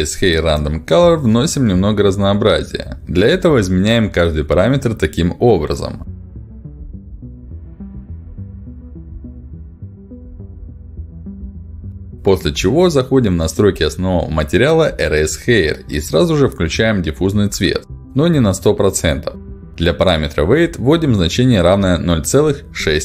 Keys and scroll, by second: 4.5 ., 4.8 5, 5.0 Return, 7.5 BackSpace, 7.9 5, 8.0 Return, 11.2 BackSpace, 11.4 1, 11.5 Return, 20.0 ., 20.7 6, 21.1 Return.